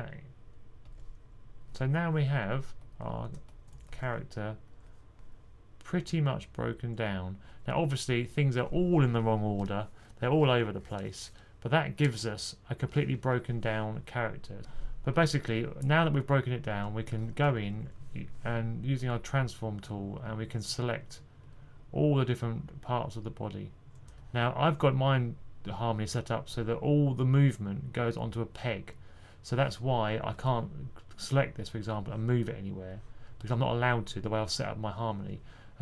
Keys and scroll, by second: 3.8 typing, 7.4 2, 17.2-17.6 typing.